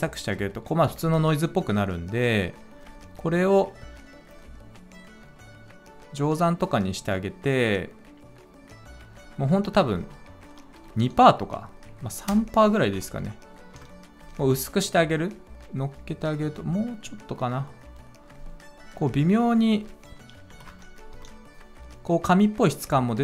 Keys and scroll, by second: 10.7 2, 10.9 Return, 12.2 BackSpace, 12.7 3, 12.9 Return, 13.7 Return, 20.4 4, 20.6 Return, 21.0 Return.